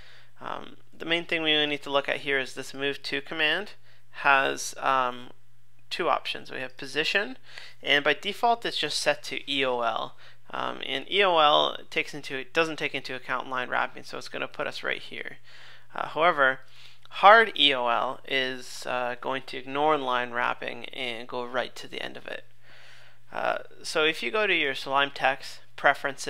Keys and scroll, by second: 1.0 super+Tab, 12.0 super+Tab, 15.4 super+Tab.